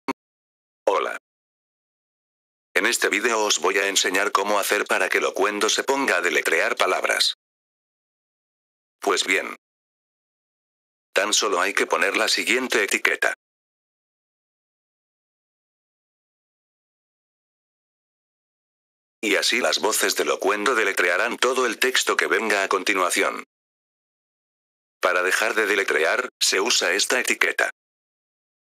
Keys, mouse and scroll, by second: 0.8 click, 13.6 click, 14.5 click, 16.5 click, 17.1 click, 19.1 click, 28.1 click.